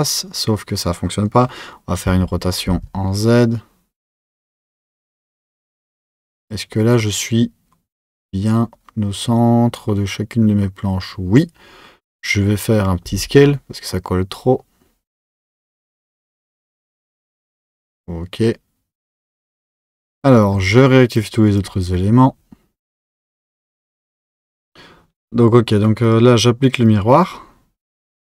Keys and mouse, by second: 21.1-23.6 drag, 23.6 z, 26.0-28.2 drag.